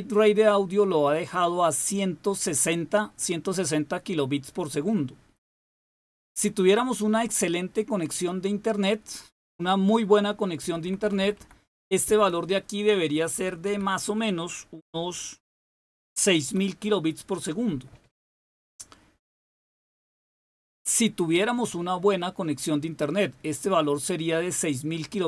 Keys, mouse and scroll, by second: 6.1 click, 10.5 Left, 10.7 Left, 10.9 Left, 11.1 Left, 11.3 Left, 13.2 Delete, 13.5 Delete, 15.8-16.3 typing.